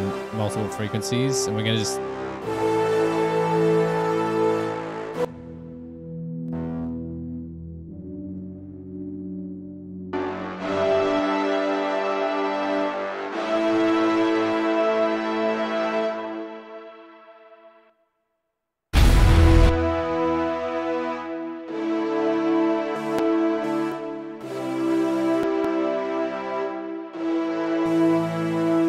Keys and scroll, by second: 18.0 space, 18.2 space.